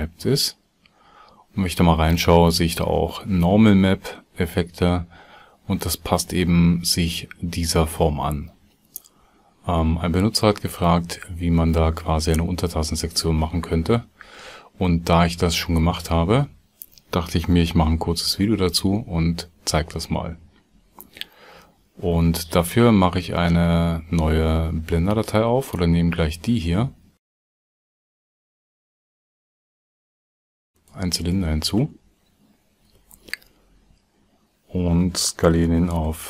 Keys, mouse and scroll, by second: 29.9 shift+x, 30.0 shift+a, 32.8 Tab, 33.3 s.